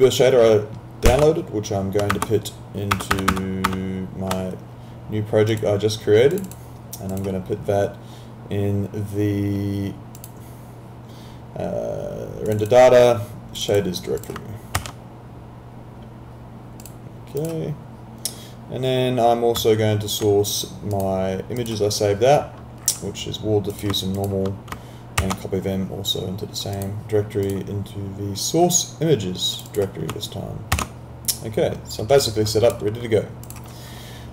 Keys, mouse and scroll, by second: 1.1 ctrl+c, 2.2 alt+Tab, 5.5 click, 10.2 click, 14.8 ctrl+v, 16.8 click, 21.0 click, 24.2 ctrl+click, 25.2 ctrl+c, 26.7 click, 30.8 ctrl+v, 33.5 click.